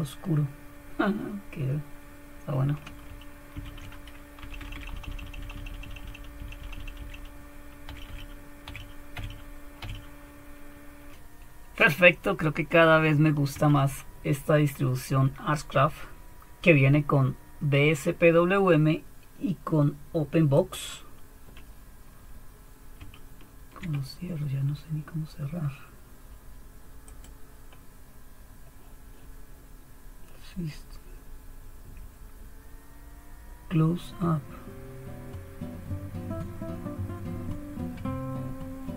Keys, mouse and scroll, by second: 3.6 ctrl+alt+t, 4.4 Down, 4.6 Down, 4.7 Down, 4.9 Down, 5.0 Down, 5.2 Down, 5.3 Down, 5.7 Down, 5.8 Down, 6.0-7.2 Down, 7.9 Home, 8.0 Up, 8.6 Up, 9.1 Up, 9.8 Up, 13.5 super+1, 20.5-23.9 drag, 27.0-28.2 drag.